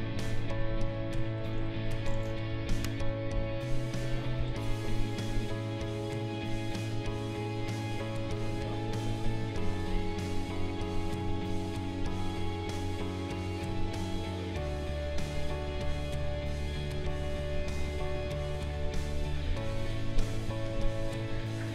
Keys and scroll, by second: 2.5 Delete, 4.4 b.